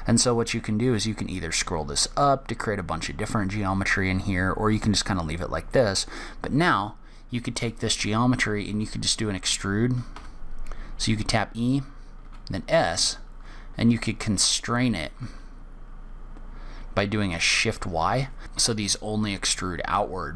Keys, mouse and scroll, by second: 10.5 e.